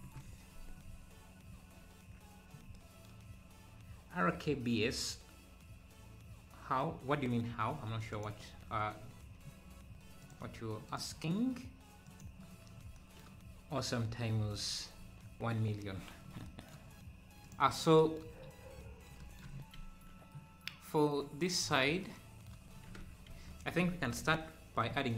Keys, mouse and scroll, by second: 0.1 ctrl+KP_Add, 8.9 Tab, 10.2-13.0 drag, 16.2 scroll up 2, 17.5 click, 19.5 Tab, 23.2 Tab, 23.6-24.1 scroll down 2, 24.2 KP_3.